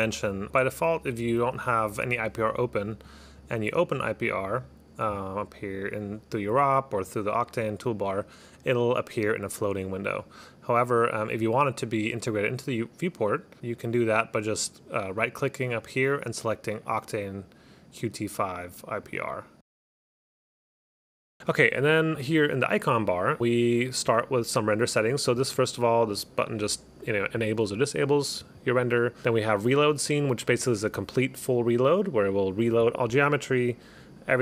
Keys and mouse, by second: 7.6 click, 25.5 click, 26.2 click, 30.6 click.